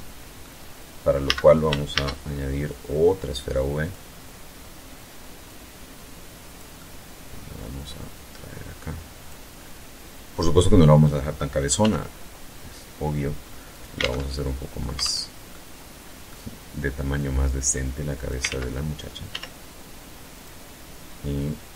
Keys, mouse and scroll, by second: 0.0 a, 0.7 shift+a, 2.6 click, 3.0-3.6 scroll down 2, 4.2-5.6 drag, 5.6-6.6 middle drag, 6.9-8.3 drag, 8.4-8.8 scroll up 2, 9.2-9.9 middle drag, 10.6 s, 12.5 alt+click, 12.7 alt+Tab, 13.7 alt+Tab, 14.3 alt+middle click, 16.0-17.2 drag, 17.2 ctrl+z, 18.1 s, 19.1 click, 20.6-21.7 drag.